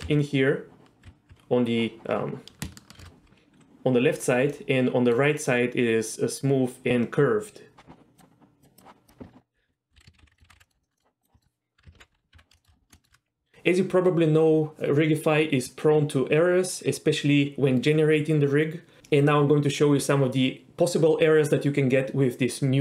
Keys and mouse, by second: 0.0 z, 1.0 d, 3.0 shift+h, 4.5-5.1 middle drag, 8.2 click, 10.4 alt+middle click, 10.5 alt+r, 10.6 alt+g, 10.7 middle click, 10.9 middle click, 11.0 middle click, 11.3 click, 11.4 shift+middle click, 12.0 alt+h, 12.4 Tab, 12.6 shift+middle click, 13.0 shift+middle click.